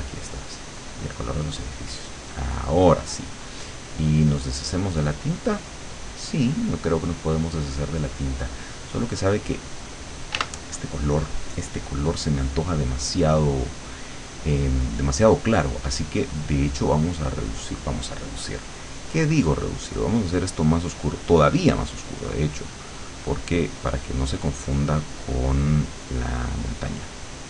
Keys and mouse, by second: 0.4 click, 0.9 click, 2.0-4.2 drag, 4.9 click, 8.9 click, 10.4 w, 14.6 click, 16.0-17.0 drag, 19.2 click, 21.6 click, 22.4 click, 23.8 click, 24.5-27.4 drag.